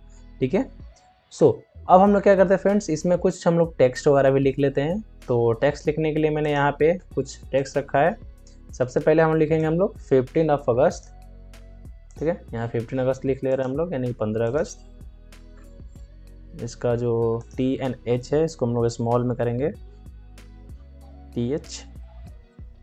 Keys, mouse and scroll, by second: 0.0 alt+scroll up 1, 1.3 alt+scroll down 1, 6.3-11.6 drag, 11.6 ctrl+c, 12.0 click, 15.2 ctrl+v, 17.3 click, 18.1 Right, 19.5 BackSpace, 20.5-21.5 typing, 22.0 shift+Left.